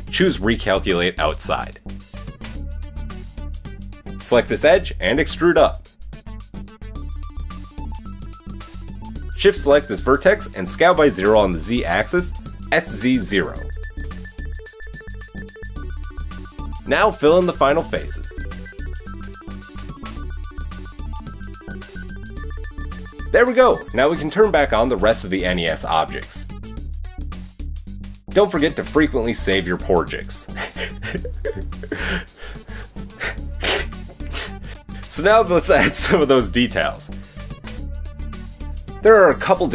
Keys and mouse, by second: 0.4 alt+n, 2.2 Tab, 3.1 Tab, 4.2 middle click, 4.2 right click, 5.1 shift+right click, 5.9 KP_7, 5.9 KP_1, 6.3 e, 6.9 g, 8.6-9.6 middle drag, 9.6 shift+click, 9.8-11.0 middle drag, 11.0-16.0 drag, 13.3 s, 16.0 KP_1, 16.7 click, 17.2 shift+click, 17.9 shift+click, 18.5 f, 19.1-21.2 drag, 21.4 f, 21.6 ctrl+z, 21.6 f, 21.9 shift+click, 22.3 f, 22.4 click, 22.9 f, 22.9 click, 23.1-26.3 middle drag, 26.3 click, 26.4 middle click, 26.8 click, 27.4-28.4 middle drag, 28.4-33.5 drag, 33.5-34.1 middle drag, 34.1 click, 34.2 middle click, 34.8-35.7 drag, 35.7-37.7 middle drag, 37.7-38.0 drag, 38.0-39.3 middle drag, 38.1 KP_3.